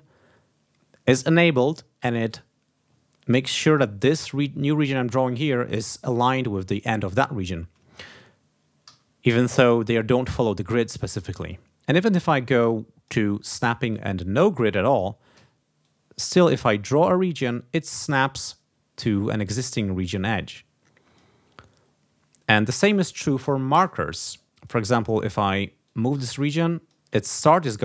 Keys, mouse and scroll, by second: 2.9-3.8 ctrl+scroll up 4, 5.2 ctrl+scroll down 2, 8.8 g, 11.4-13.2 drag, 14.0-14.3 ctrl+scroll down 2, 15.3 d, 15.8-17.6 drag, 19.4-21.3 drag, 22.8 click, 23.9 KP_Enter, 24.4 click, 25.8-27.0 drag, 27.2-27.6 ctrl+scroll up 2.